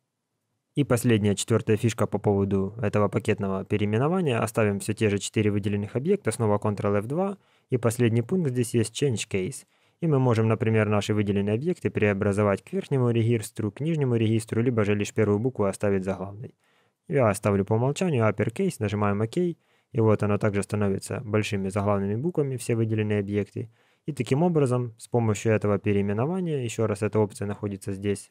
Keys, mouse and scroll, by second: 6.6 ctrl+F2, 21.2 scroll up 1, 22.0-22.6 scroll up 19, 26.9 click.